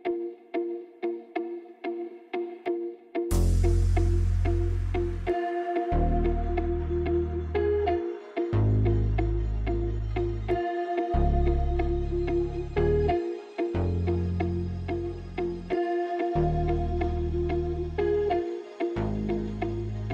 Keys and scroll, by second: 0.2 shift+a, 6.2 Tab, 6.7 a, 6.8 e, 7.5 e, 15.5 alt+z, 16.3 ctrl+z, 17.3 e.